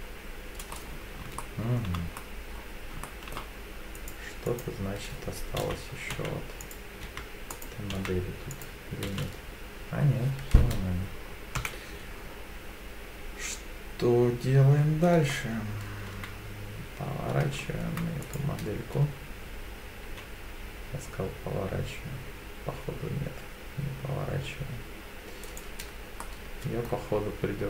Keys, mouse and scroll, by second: 0.7 scroll up 2, 1.4 shift+middle click, 2.1-2.5 scroll up 2, 2.5-3.0 scroll down 2, 3.0 shift+middle click, 4.0-5.6 drag, 5.6 l, 6.6 click, 6.6 l, 7.1 l, 7.5 click, 7.9 l, 8.5 click, 9.1 l, 10.5-11.0 scroll down 2, 11.6 KP_7, 12.2-13.7 scroll down 1, 13.7-14.6 scroll down 1, 16.1 r, 18.3 right click, 20.0 g, 25.5 right click, 26.2 middle click, 27.3 Tab.